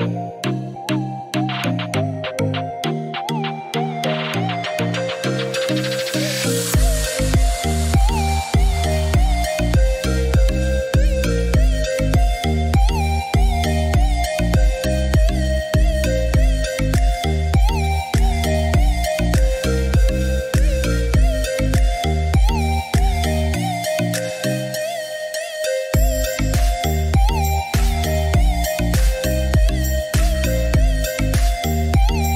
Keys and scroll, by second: 3.9 Escape, 10.0 3, 11.1-12.6 typing.